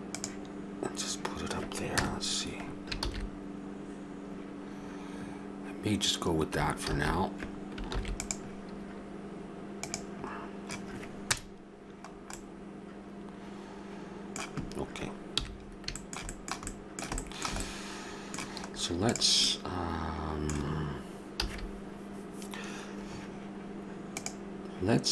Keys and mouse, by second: 1.9 KP_0, 2.9 shift+z, 6.9 shift+z, 7.8 ctrl+s, 11.2 KP_0, 15.3 n, 19.1 right click, 21.3 a.